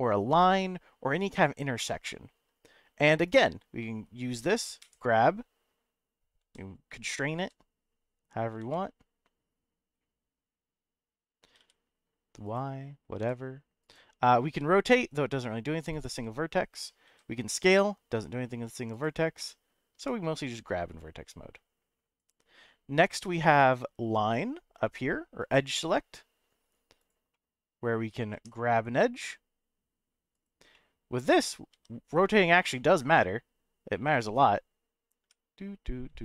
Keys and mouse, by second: 0.4 click, 1.4 click, 1.8 middle click, 3.2 click, 3.8 middle click, 4.8 g, 6.4 x, 7.4 z, 8.6 g, 11.6 t, 12.4 right click, 13.2 g, 13.8 right click, 14.5 r, 15.9 right click, 17.1 s, 18.9 right click, 19.5 middle click, 20.0 g, 22.2 right click, 25.4 click, 27.0 click, 27.3 middle click, 28.3 g, 30.3 right click, 30.7 middle click, 31.7 r, 34.0 x, 35.2 y, 36.0 x.